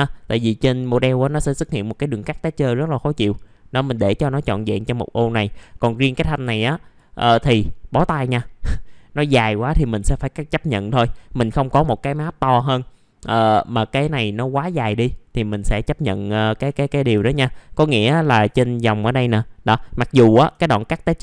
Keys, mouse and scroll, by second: 2.7-4.6 drag, 4.6 click, 5.7 middle click, 6.4 click, 7.4 click, 8.4-8.8 scroll down 1, 8.8 middle click, 15.5 alt+middle click, 16.9 scroll up 1, 17.3 alt+middle click, 18.5 alt+middle click, 19.2-19.6 scroll up 1, 19.6 middle click, 19.7 scroll down 1, 20.1 alt+middle click.